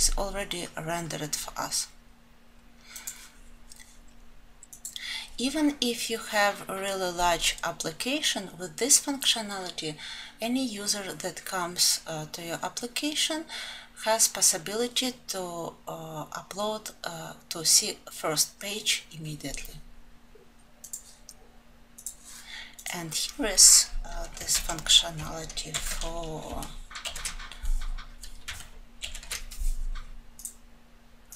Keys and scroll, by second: 24.2 alt+F12, 26.6 alt+1.